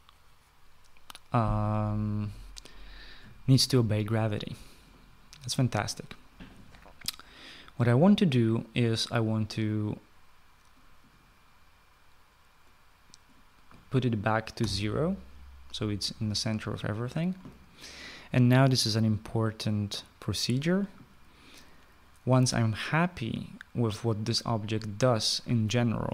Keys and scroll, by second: 14.9 0.